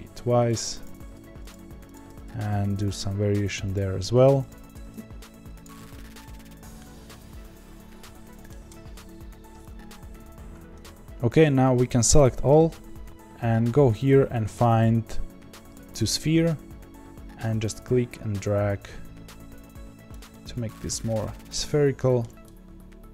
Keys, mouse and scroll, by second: 0.8 click, 0.9 g, 1.9 click, 2.1 g, 3.7 click, 4.5 click, 4.7 g, 5.7-8.5 middle drag, 8.5-10.4 scroll down 1, 10.4-12.1 scroll down 1, 12.1 a, 15.7-17.5 drag, 20.3-22.5 middle drag, 22.5 click.